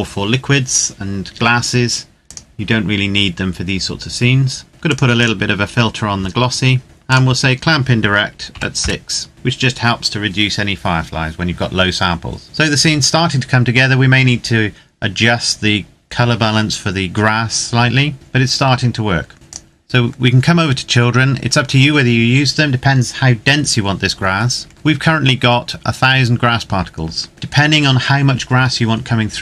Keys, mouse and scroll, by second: 1.9 click, 4.7 click, 8.1 KP_6, 8.5 KP_Enter, 19.3 click, 19.8-22.7 scroll down 1, 24.3-26.9 scroll up 1, 27.3-28.5 scroll down 1.